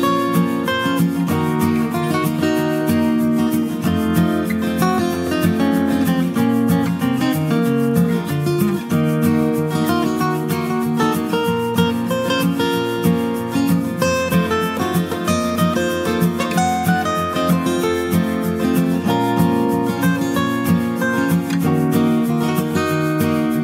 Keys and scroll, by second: 21.5-21.8 scroll.